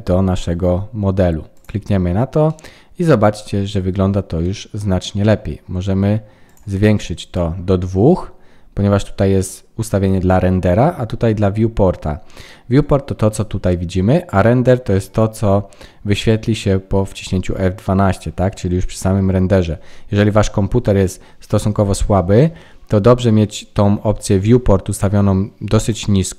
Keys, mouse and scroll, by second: 2.4 middle click, 3.4-4.4 scroll up 5, 4.4 middle click, 6.4 click, 7.0-7.9 scroll down 2, 7.9-8.5 scroll down 1, 25.7 click.